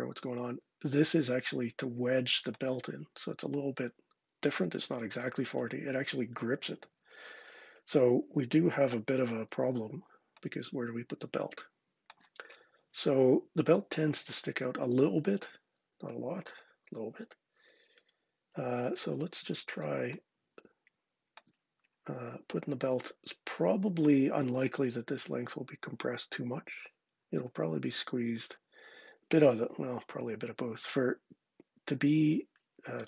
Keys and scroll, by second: 8.8 super+z, 9.3 super+z.